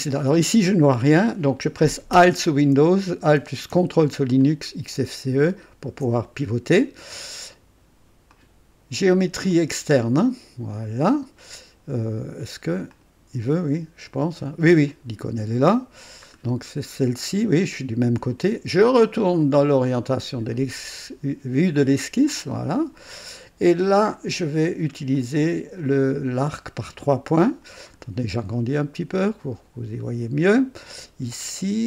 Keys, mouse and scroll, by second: 4.4-6.1 ctrl+alt+drag, 8.3 click, 9.5 click, 12.9 click, 14.9 click, 16.3-16.7 scroll down 1, 21.9 click, 22.9 scroll up 2, 23.4 right click, 25.1 click, 26.4 click, 27.9-28.3 scroll up 2, 29.4 right click, 30.9 click.